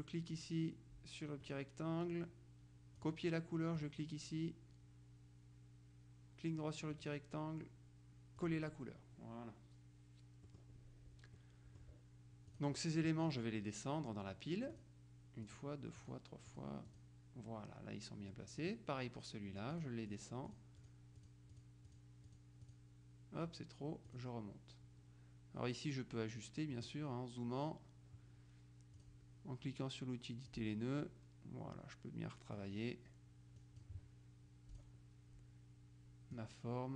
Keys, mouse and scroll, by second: 1.5 right click, 3.1 click, 3.9 click, 7.0 right click, 8.5 click, 10.5 middle click, 11.5 middle click, 12.6 click, 14.8 click, 15.5 click, 16.6 click, 18.7 click, 19.8-23.3 drag, 24.1 click, 26.8 middle click, 29.1 click, 30.6-33.1 drag, 33.7 click, 34.9 click, 36.5-36.9 drag.